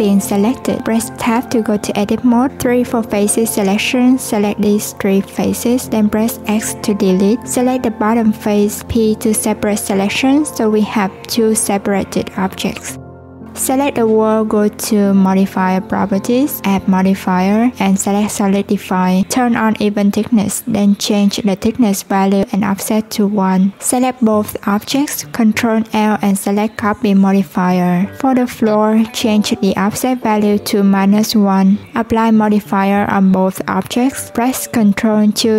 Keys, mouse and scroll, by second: 1.0 Tab, 3.1 click, 3.6 shift+click, 3.9 shift+click, 4.7 x, 6.9 click, 10.2 Tab, 11.2 click, 12.6 click, 13.6-16.5 drag, 17.0-22.0 drag, 22.3 shift+click, 23.0 ctrl+l, 25.3 click, 26.9-31.3 drag, 32.1-34.6 drag, 34.6 ctrl+2.